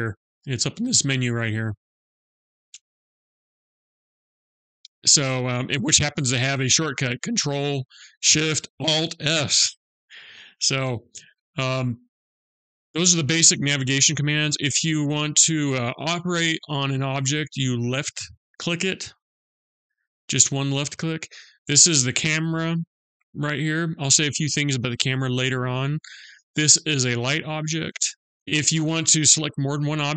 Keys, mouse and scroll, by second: 1.1 click, 12.2 middle click, 12.2-12.5 scroll up 1, 12.5 middle click, 16.3 scroll up 1, 17.6-18.0 scroll down 1, 18.5 click, 20.3 click, 26.5 click, 28.0 click.